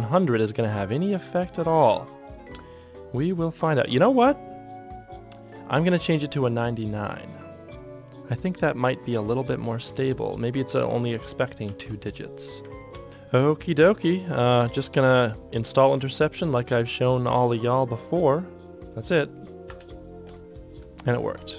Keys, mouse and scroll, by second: 11.8 KP_9, 11.9 KP_9.